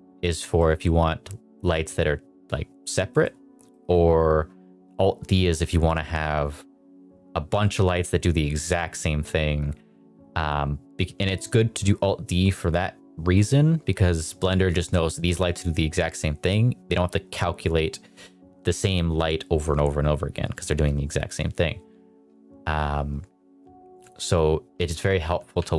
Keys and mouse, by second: 0.2 middle click, 0.5 middle drag, 1.6 middle click, 3.0 middle click, 3.6 middle click, 5.1 click, 24.7 r, 25.3 click, 25.5 g.